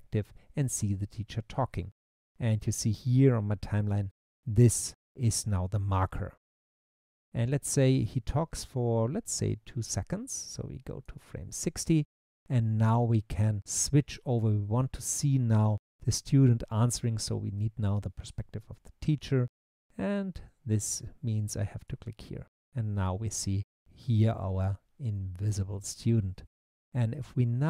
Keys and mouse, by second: 21.8 click.